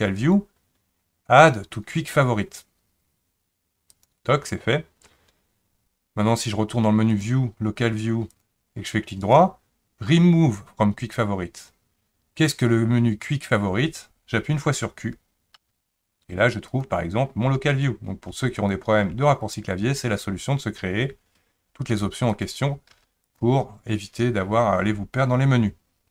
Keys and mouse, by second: 7.1-13.7 drag, 15.5 q, 17.4 q, 18.3 q, 19.1 q, 21.9 q, 22.9 q.